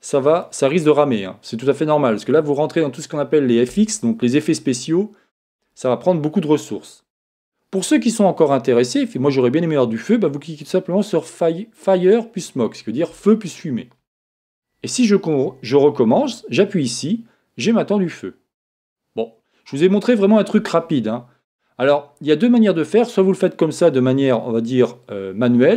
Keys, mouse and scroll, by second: 0.3 click, 9.0 click, 16.3 click, 20.4 click, 21.1-25.4 middle drag.